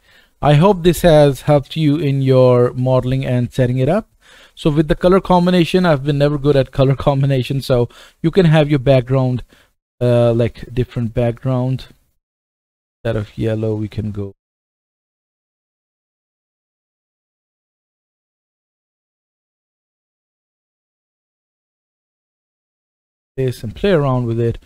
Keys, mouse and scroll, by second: 0.0-1.3 middle drag, 0.0 click, 1.3-3.7 drag, 1.4 KP_0, 2.4 middle click, 3.7-4.1 middle drag, 4.0 scroll up 2, 4.1 click, 9.4 click, 11.0 click, 11.8 click, 18.9-24.6 right drag, 22.6 click.